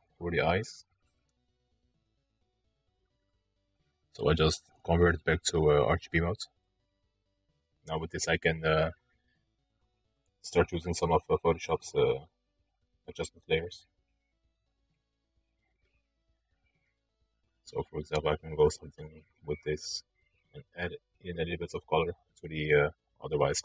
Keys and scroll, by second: 1.9 ctrl+d.